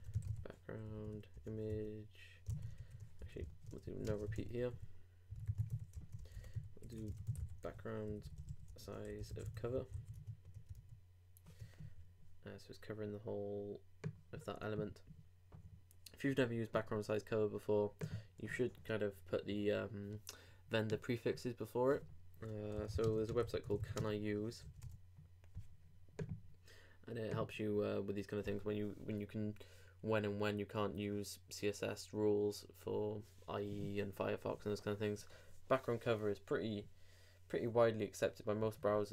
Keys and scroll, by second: 2.5 super+n, 2.8 super+BackSpace, 3.2 super+Up, 3.4 super+Right, 3.8 super+Left, 5.9 super+t, 6.0 super+Right, 6.2 super+Return, 9.9 super+;, 10.1 super+Tab, 10.7 super+r.